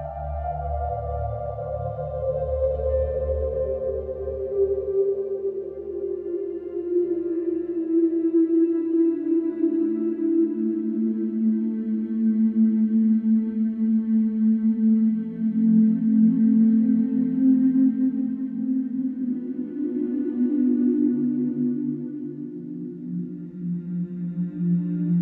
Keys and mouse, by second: 0.0-6.1 drag, 7.8-9.5 drag, 10.1-11.1 drag, 12.1 click, 16.3 click, 17.2 click, 17.7 d, 19.0 typing, 20.2 click, 21.1 click, 22.0-23.4 drag.